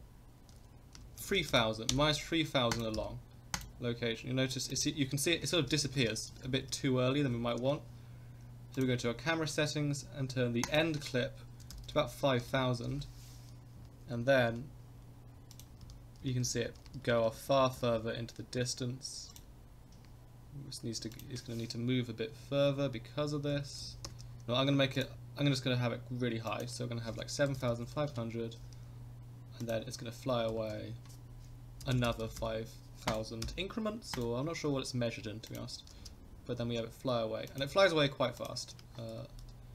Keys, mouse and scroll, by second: 2.9 i, 4.8 click, 5.4 Right, 5.5 space, 6.0 space, 6.3 Left, 6.5 Left, 6.7 Left, 8.7 click, 10.6-13.0 drag, 11.8 0, 12.0 0, 13.8 Right, 14.2 Right, 14.5 Right, 15.5 click, 15.8 Right, 16.3 Right, 16.5 Right, 16.7 Right, 16.9 Right, 17.1 Right, 17.2 Right, 17.4 Right, 17.5 Right, 17.6 Right, 17.8 Right, 17.9 Right, 19.3 click, 21.1 click, 23.5 g, 24.9 click, 26.5-28.7 drag, 27.7 0, 29.6 click, 30.5 g, 33.4 i, 35.5 click, 35.9 space, 36.7 space, 37.5 click, 38.4 drag, 39.1 n, 39.4 n.